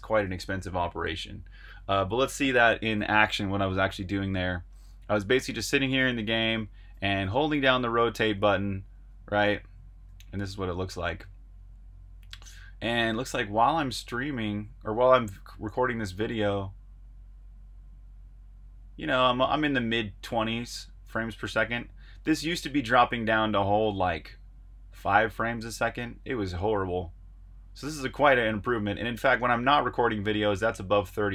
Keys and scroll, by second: 0.2 super+h, 0.6 typing, 0.8 super+h, 7.2-8.0 typing, 9.6-12.5 typing.